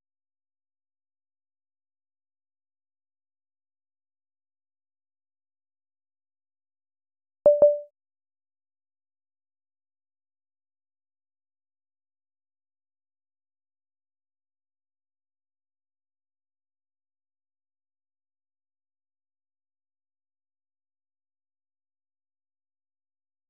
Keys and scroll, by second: 0.0-10.2 typing, 11.1 ctrl+u, 11.5 ctrl+u, 12.5 ctrl+u, 12.9 ctrl+u, 13.2 ctrl+u, 13.8 ctrl+u, 14.6-15.9 typing, 19.1-23.4 typing.